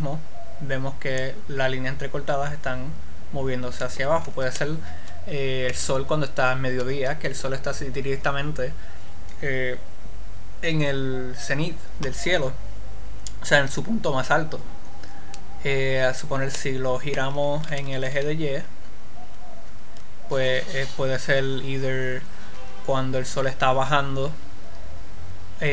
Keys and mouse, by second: 0.4 click, 5.0-12.0 middle drag, 15.8-17.0 drag, 17.0 middle click, 18.1 r.